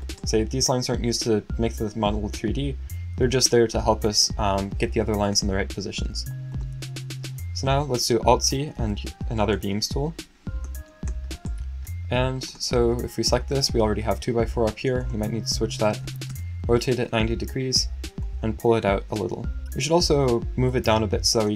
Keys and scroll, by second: 8.3 alt+c, 8.5-9.6 typing, 15.6-16.5 typing.